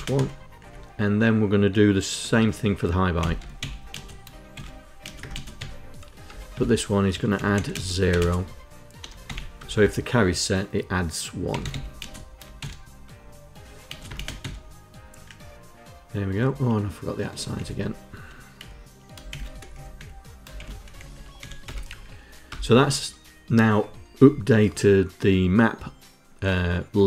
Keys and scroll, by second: 1.8 Tab, 2.6-5.2 typing, 4.1 shift+Insert, 5.8 Return, 6.1 Tab, 6.6-8.9 typing, 9.2 Return, 9.4 Tab, 10.9-11.8 typing, 12.2 shift+Insert, 13.5 space, 13.7 KP_Add, 14.1 KP_2, 16.0 Left, 17.2 Left, 18.2 Right, 18.9 shift+', 19.2 Up, 19.6 Left, 20.2 shift+;, 20.6 Down, 20.8 Down, 21.0 End, 22.1 Return.